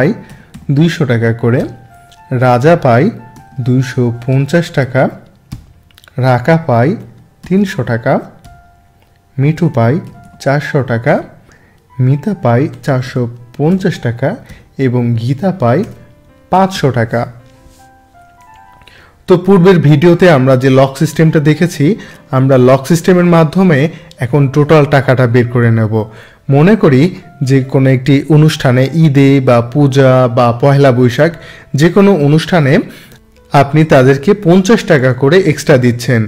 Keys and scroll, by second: 1.6 Down, 2.7 Up, 7.0 3, 7.4 0, 8.4 Down, 9.7 4, 11.0 Down, 12.7 4, 13.0 5, 13.7 0, 14.5 Down, 15.8 5.